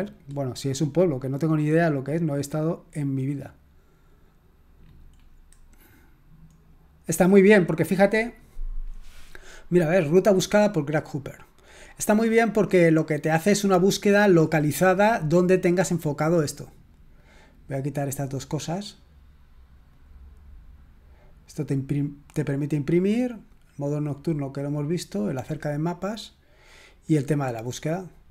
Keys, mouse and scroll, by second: 0.3-1.1 scroll up 1, 1.1 click, 2.3-3.5 scroll up 1, 3.9-4.7 scroll up 2, 4.8-6.3 scroll down 2, 6.6-7.3 scroll down 2, 11.2-11.7 drag, 12.0 click, 12.6-13.2 scroll up 3, 13.7-14.3 drag, 14.6-15.2 scroll up 2, 17.2 click, 18.2 click, 19.9 click, 22.6 click, 25.2 click, 26.5 click.